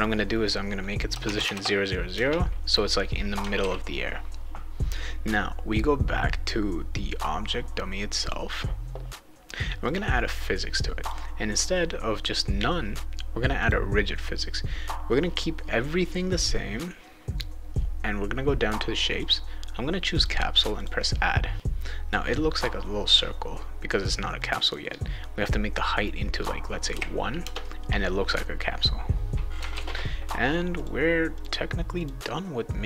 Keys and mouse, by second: 1.2 Tab, 1.4 Tab, 3.6 ctrl+s, 8.2 click, 9.8 click, 11.0 click, 13.6 click, 19.2 click, 20.1 click, 20.8 click, 24.4 click, 29.7 ctrl+s, 30.7 click, 31.3 click, 32.0 click.